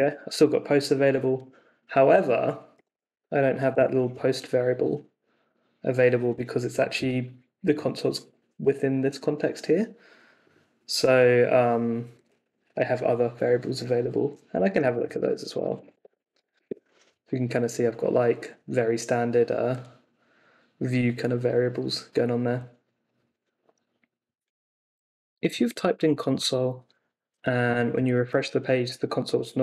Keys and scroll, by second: 0.0-0.2 typing, 2.5-3.6 typing, 3.7 Return, 14.3-17.0 typing, 28.1 super+r.